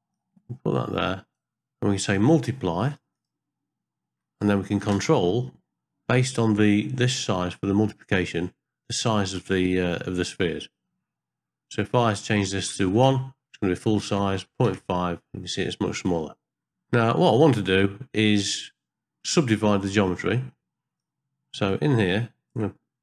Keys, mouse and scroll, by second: 0.1-1.4 drag, 2.0-3.3 drag, 5.0 ctrl+space, 9.6-10.9 middle drag, 12.2 click, 14.5 KP_Enter, 16.7 middle click, 16.9-17.4 scroll up 1, 17.4 ctrl+middle click, 18.0 scroll up 1, 19.3 middle click, 19.7-20.3 scroll up 1, 20.3 middle click, 20.6-21.0 scroll up 1, 21.0 click, 22.5 shift+right click.